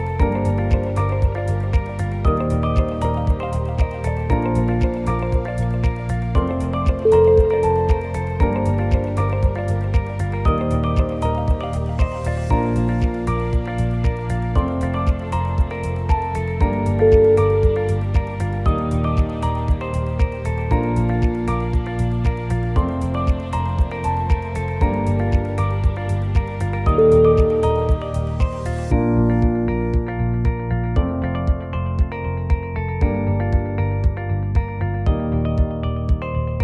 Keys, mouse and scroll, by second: 1.2 KP_1, 1.7 s, 4.3-5.8 middle click, 5.2 middle click, 5.3 middle click, 5.8 g, 8.5 f, 9.0 i, 10.7 g, 12.2 middle click, 13.0 s, 15.0 middle click, 15.1 middle click, 16.3 click, 16.8 alt+click, 17.5-20.2 shift+click, 20.4 g, 23.9 click, 24.4 alt+click, 25.1 g, 26.8 g, 28.5 ctrl+r, 30.4 g, 33.3 alt+click, 33.8 g, 36.0 middle click, 36.1-36.6 middle click, 36.3 middle click, 36.4 middle click.